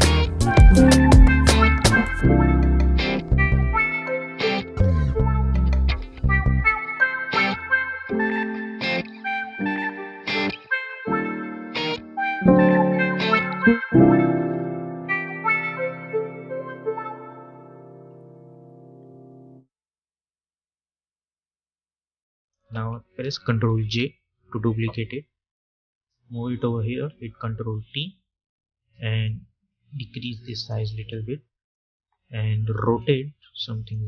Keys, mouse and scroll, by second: 1.9 Return, 4.9 shift+click, 6.6 ctrl+g, 8.8 right click, 11.6-17.8 drag, 17.8 v, 21.8-23.7 drag, 23.7 ctrl+j, 25.4-27.6 drag, 27.6 ctrl+t, 29.1-34.0 drag.